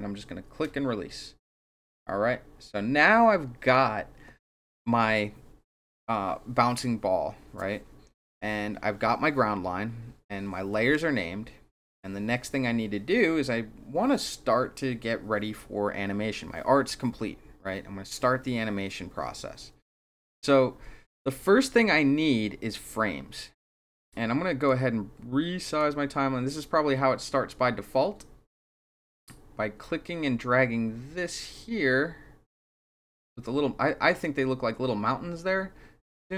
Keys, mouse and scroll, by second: 24.6-25.7 drag, 30.3-36.3 drag.